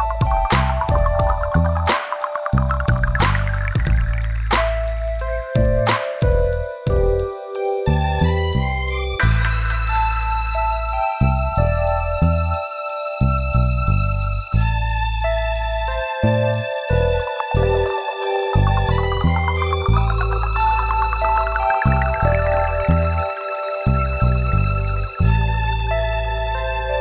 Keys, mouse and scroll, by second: 0.1 click, 4.9 click, 8.9 click, 9.0 click, 10.0 click, 10.1 click, 10.6 scroll up 1, 12.4 click, 12.5 click, 13.2 middle click, 13.9 click, 15.6 click, 15.7 click, 17.7 click, 17.8 click, 20.4 click, 24.0 click, 24.3 click, 25.3 click.